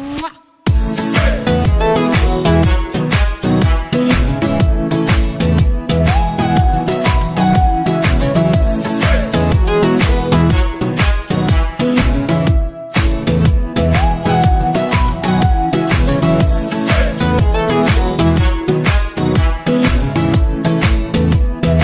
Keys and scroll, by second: 6.7 space.